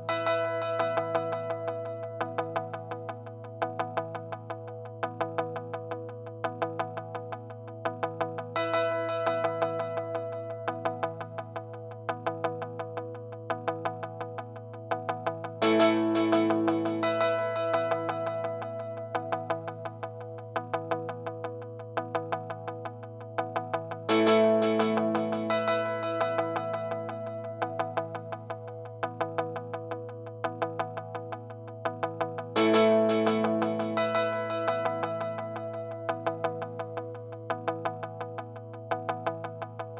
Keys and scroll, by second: 1.8 super+z, 3.8 super+z, 13.4 super+z, 16.0 space, 32.0 space.